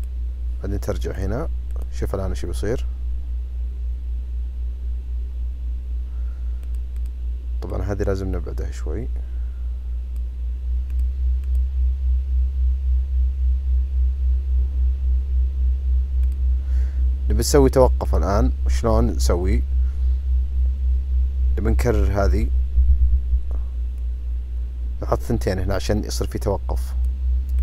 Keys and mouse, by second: 1.1 click, 1.7 click, 6.6 click, 7.0-10.2 drag, 11.4 click, 16.2 click, 18.0 click, 22.7 ctrl+c, 22.9 ctrl+v, 24.0-27.0 drag.